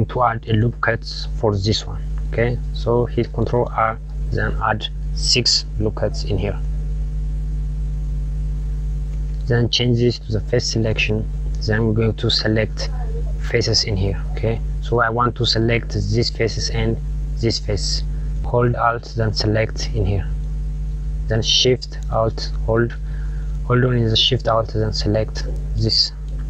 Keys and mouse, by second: 3.7 ctrl+r, 7.6 click, 8.6 click, 10.9 click, 18.0 click, 19.7 alt+click, 25.2 alt+shift+click, 26.3 KP_Subtract.